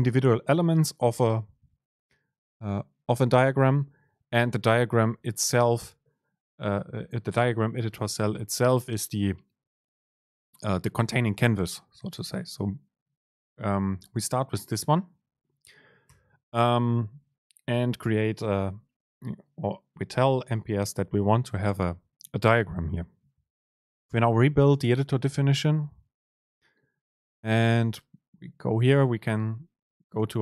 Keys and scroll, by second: 24.0 ctrl+shift+super+F9.